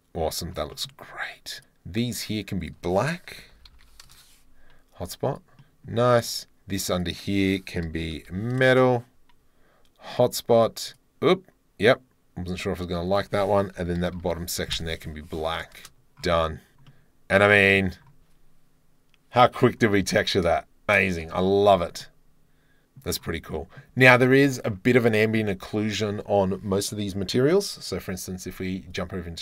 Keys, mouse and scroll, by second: 0.1 click, 0.3 middle click, 0.8-2.6 middle drag, 4.2-5.3 middle drag, 5.6 middle click, 6.2 right click, 6.9-8.8 right drag, 10.2 right click, 13.1-15.8 right drag, 16.4 middle click, 16.9 drag, 17.1 middle click, 20.2-21.3 middle drag, 21.3 KP_Decimal, 21.3 middle click, 22.2 middle click, 22.5 middle click, 23.0-23.5 middle drag, 23.6 middle click, 24.8-25.4 drag.